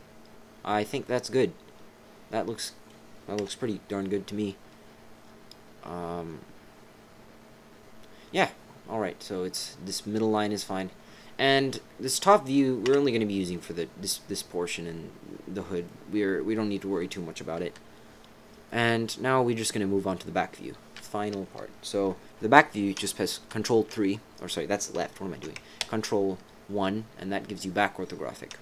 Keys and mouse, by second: 1.0 click, 1.7 click, 2.2 right click, 3.4 KP_7, 11.5 middle click, 11.9 right click, 12.1 click, 12.8 KP_7, 15.8 middle click, 17.6 KP_3, 23.5 ctrl+KP_3, 25.8 ctrl+KP_1.